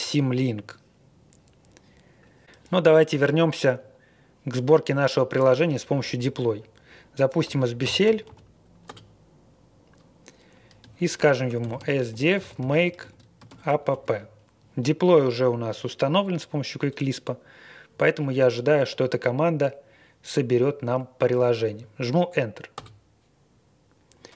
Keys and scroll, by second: 7.4 ctrl+r, 7.6-8.7 typing, 8.9 Return, 11.1-14.4 typing, 22.8 Return.